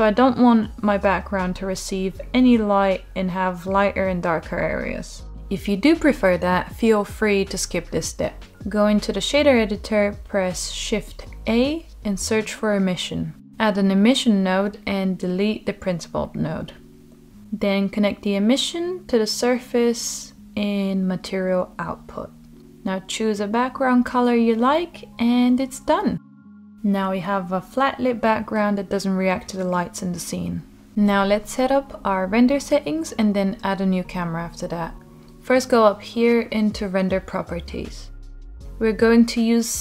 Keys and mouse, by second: 16.0 click, 19.0-20.2 drag, 22.0 click, 25.8 middle click, 27.6-29.1 drag, 29.1 middle click.